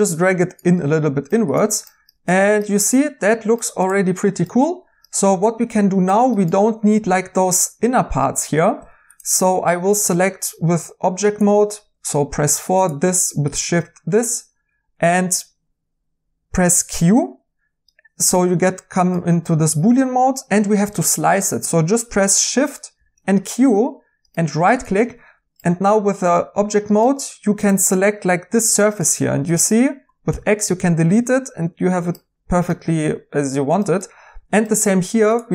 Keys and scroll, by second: 8.8 Tab, 16.9 q, 22.9 shift+q, 30.2 x.